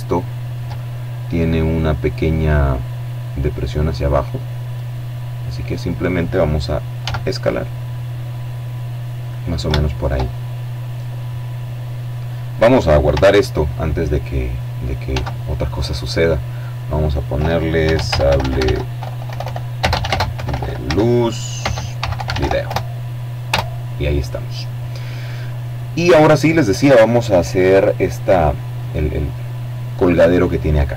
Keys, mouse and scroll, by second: 2.9 middle click, 5.7 s, 7.9 click, 8.4 shift+right click, 8.9 shift+click, 10.7 scroll down 1, 11.0 click, 13.7 ctrl+s, 15.1 click, 16.5-21.0 typing, 21.3 Return, 22.1 Return, 24.1-25.3 drag.